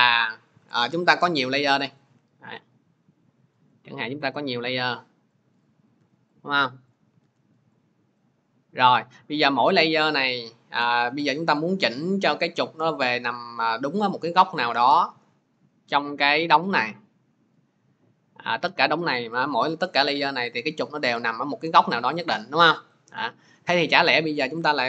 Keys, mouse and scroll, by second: 0.5 Delete, 1.8 click, 2.4 ctrl+d, 3.9 click, 4.5 ctrl+d, 5.5 click, 5.8 ctrl+d, 6.7 click, 7.1 ctrl+d, 8.0 click, 10.3 click, 11.0 shift+click, 11.5 click, 16.1 shift+click, 19.3 click, 19.9 click, 22.1 click, 24.5 click.